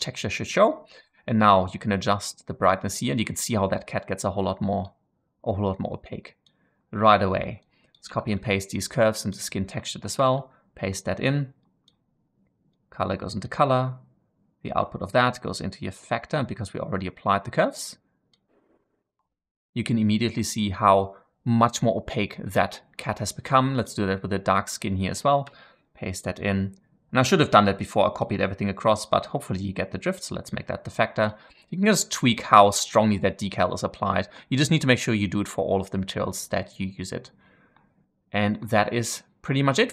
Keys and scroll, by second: 8.0 ctrl+c, 10.2 ctrl+v, 25.4 ctrl+v.